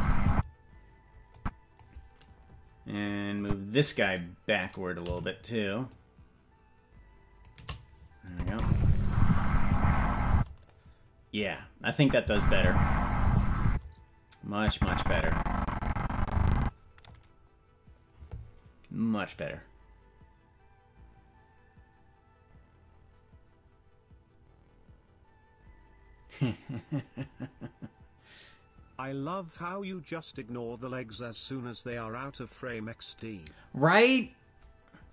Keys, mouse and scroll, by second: 0.3 space, 1.4 click, 3.4 click, 5.9-7.5 shift+drag, 8.3 click, 8.5 space, 10.3 space, 12.0 click, 12.2 space, 13.6 space, 14.6-16.7 drag, 17.0-17.3 scroll up 4.